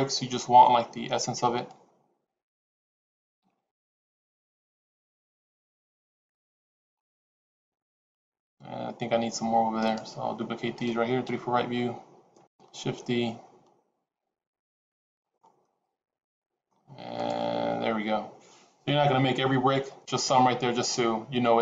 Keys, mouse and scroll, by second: 0.2 g, 3.5 shift+d, 6.6 scroll down 3, 6.8 middle click, 9.7 shift+click, 11.2 KP_3, 12.7 shift+d, 15.5 middle click, 17.1 click.